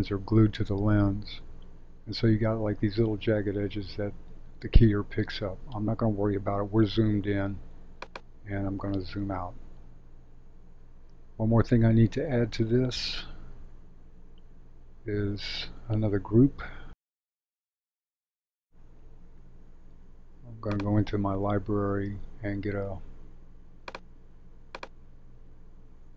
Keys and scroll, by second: 9.0 shift+z.